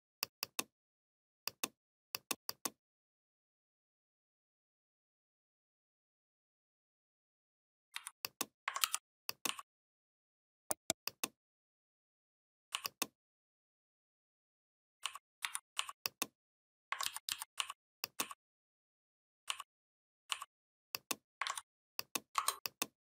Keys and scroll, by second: 7.7 v, 8.7 ctrl+g, 15.3 v, 16.9 ctrl+d, 21.3 ctrl+z.